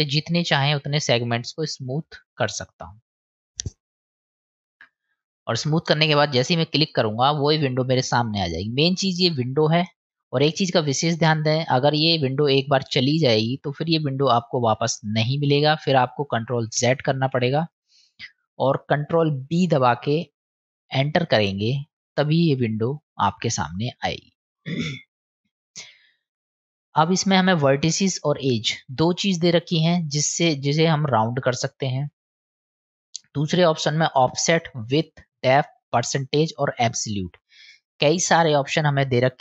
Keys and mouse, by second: 17.4 ctrl+z, 27.7 click, 28.4 click, 33.1-39.4 drag.